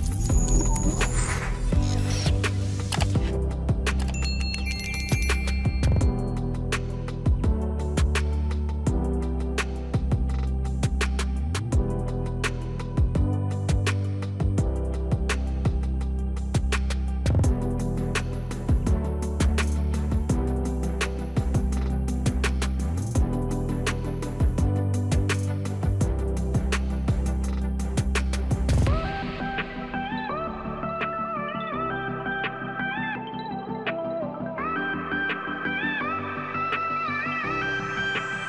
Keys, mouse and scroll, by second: 0.1 BackSpace, 1.9-3.6 typing, 6.9 ctrl+a, 7.8 Delete, 12.8 click, 17.0 click, 21.0 click, 23.2 click, 26.7 click, 28.4 super+r, 31.5 BackSpace, 33.6 BackSpace, 36.5 ctrl+a, 36.7 Delete.